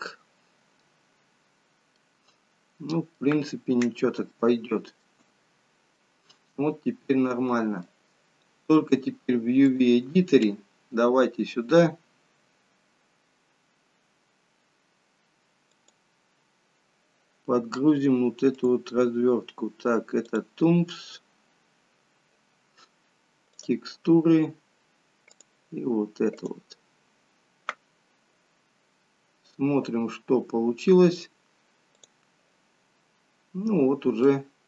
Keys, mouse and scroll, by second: 0.8-1.5 scroll up 2, 1.5-2.0 scroll down 1, 2.0 middle click, 3.6 middle click, 4.3 shift+middle click, 6.0 middle click, 32.2 click, 33.8-34.3 scroll up 1, 34.3 middle click.